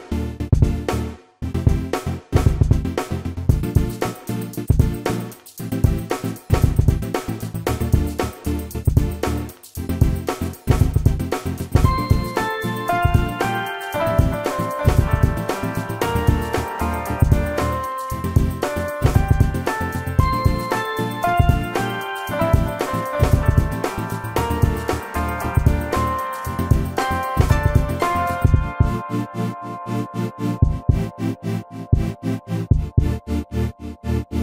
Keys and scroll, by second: 1.6 space, 2.1 Escape, 4.4 ctrl+g, 13.0 space, 14.7 p, 15.9-16.8 typing, 16.5 Return, 18.2 ctrl+g, 19.1 m, 25.5 /, 26.1 4, 26.2 Return, 27.1 space, 28.6 Delete.